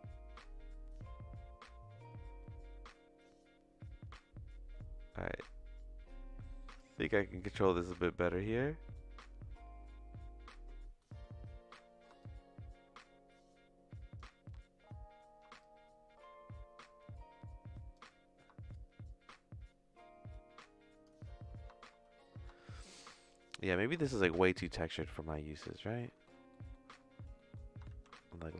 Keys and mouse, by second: 4.8-6.8 drag, 7.4 middle click, 8.0 middle click, 8.9 middle click, 11.0 middle click, 12.2-14.3 shift+drag, 15.7-18.0 shift+drag, 18.8-21.1 shift+drag, 22.6 shift+middle click, 23.5 middle click, 24.0 shift+middle click, 25.3 middle click, 26.2 middle click, 26.5 middle click, 27.4 middle click, 27.9 shift+a.